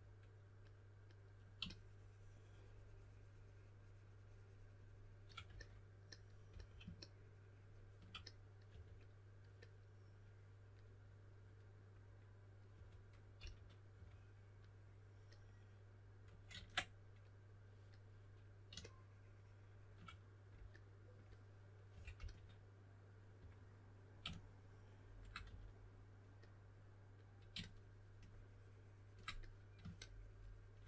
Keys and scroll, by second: 6.4 s, 8.6 4, 12.7-13.9 typing, 21.6-23.3 typing, 25.4 4.